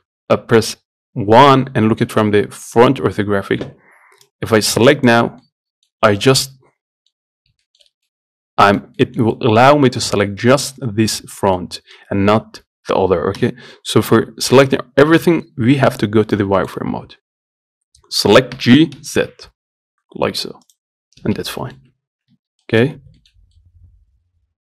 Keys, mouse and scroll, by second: 4.5-5.7 drag, 5.7 middle click, 6.2-6.6 scroll down 3, 6.7 middle click, 7.6 scroll up 1, 7.9-13.6 shift+middle drag, 13.6 KP_1, 14.8 z, 15.6-16.6 scroll up 2, 16.6 Left, 17.3 scroll up 4, 18.8 g, 21.2 scroll down 1, 21.5 z, 21.8 middle click, 22.2 scroll down 1, 22.6 Tab, 22.9 middle click, 23.2 scroll up 1, 23.4 shift+middle click, 23.6 scroll down 1, 23.8-24.6 middle drag.